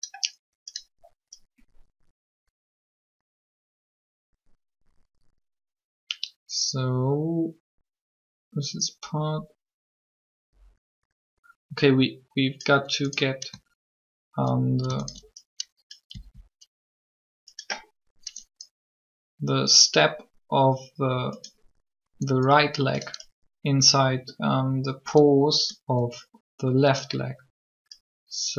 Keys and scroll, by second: 16.1 shift+s.